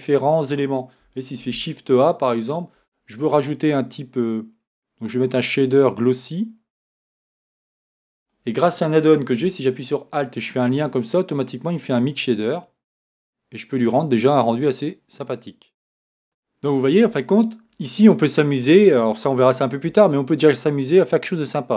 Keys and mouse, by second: 1.7 shift+a.